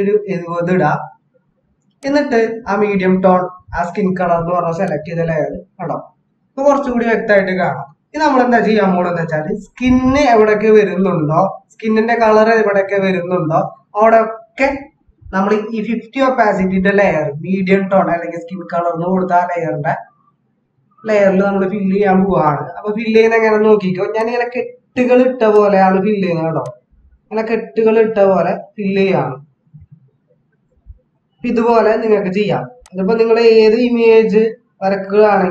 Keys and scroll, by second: 7.8 ctrl+z.